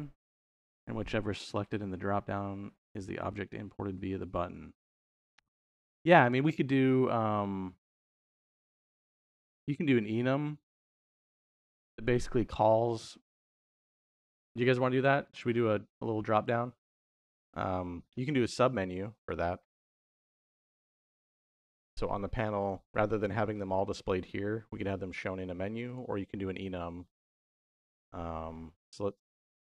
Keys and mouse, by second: 21.6 n, 25.7 click, 26.4 middle click, 28.4 middle click.